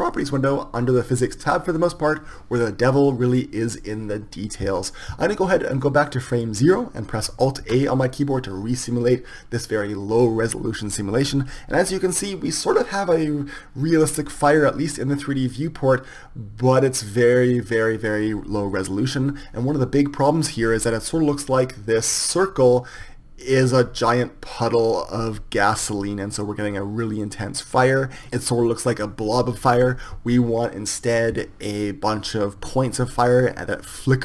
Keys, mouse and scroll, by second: 5.9-7.7 drag, 7.7 alt+a, 28.2-31.3 drag.